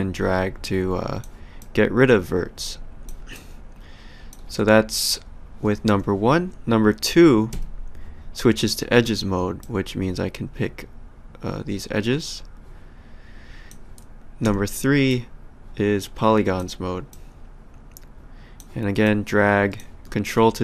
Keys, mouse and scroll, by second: 1.6 ctrl+click, 3.3 ctrl+click, 7.5 2, 9.6 click, 14.4 3, 15.1 click, 17.1 click, 19.0 click, 20.2 ctrl+click.